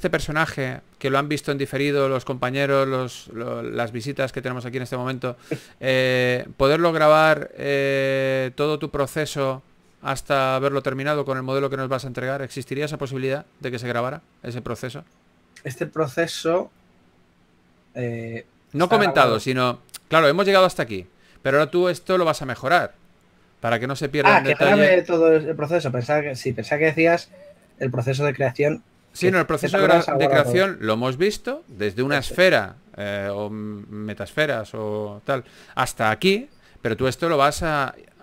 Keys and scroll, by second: 4.8 shift+f.